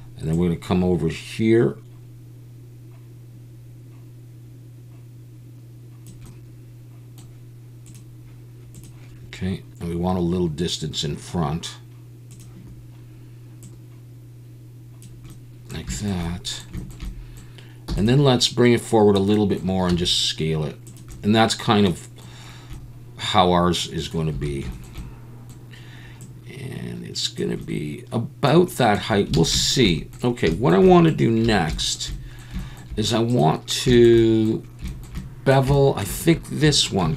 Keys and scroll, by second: 17.9 e, 19.9 s, 24.3 a, 29.4 alt+a, 31.4 2, 37.0 ctrl+b.